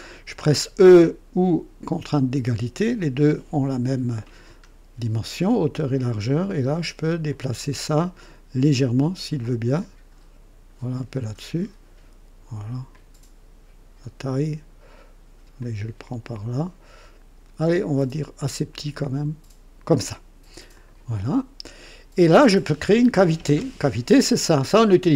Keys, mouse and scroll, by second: 2.2 e, 4.0-4.6 scroll down 2, 6.4 click, 8.7-9.4 drag, 9.8-12.2 drag, 12.9-15.1 drag, 15.6-20.0 drag, 20.7 click, 21.8-22.9 drag.